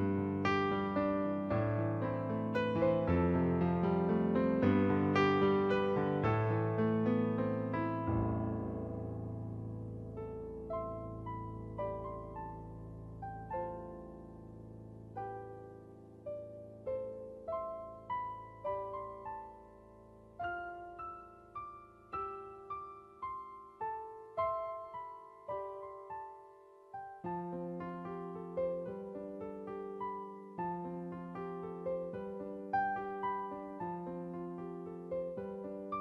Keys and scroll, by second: 3.0-5.6 typing, 17.6 typing, 18.5 ctrl+z, 19.4 typing, 20.7 space, 21.7-25.6 typing, 35.2 b.